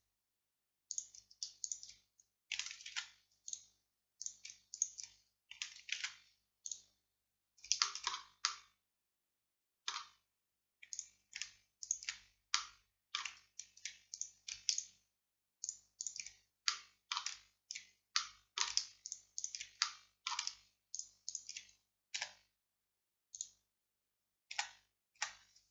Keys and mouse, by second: 3.0 alt+m, 13.5-24.6 drag, 22.2 x, 24.6 z, 25.2 z.